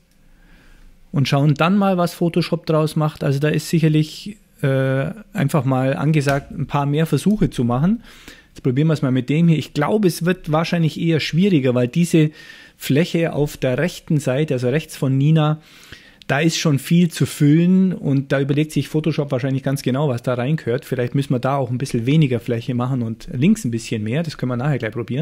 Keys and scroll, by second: 6.4 Return.